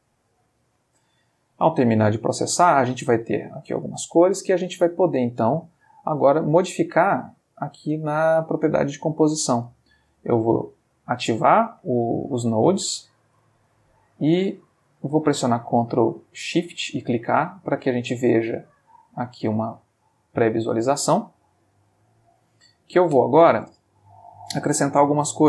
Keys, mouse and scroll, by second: 2.7 click, 3.9 click, 5.4 click, 10.5 click, 12.7 click, 13.8 click, 14.5 click, 15.5 ctrl+shift+click, 16.6-18.1 drag, 18.8 click, 20.6 click, 21.3-23.1 ctrl+middle drag, 24.5 shift+a.